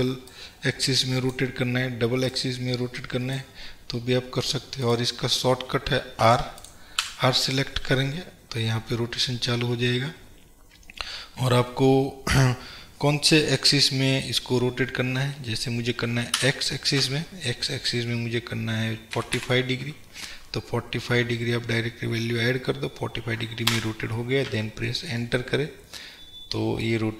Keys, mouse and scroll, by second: 4.2-4.9 scroll up 1, 6.3 r, 6.7 click, 7.1 r, 23.9 Return, 25.4-27.1 middle drag.